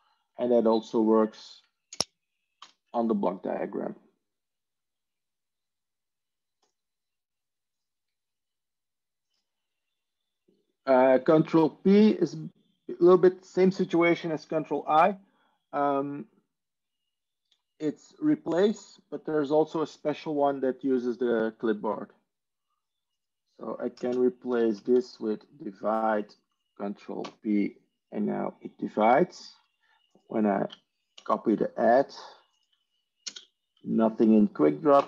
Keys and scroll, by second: 0.0 ctrl+e, 1.9 ctrl+space, 2.5 ctrl+o, 24.0 ctrl+space, 24.1-25.2 typing, 27.1 ctrl+p, 31.0 ctrl+p, 31.6 ctrl+c, 33.1 ctrl+space, 34.9 ctrl+p.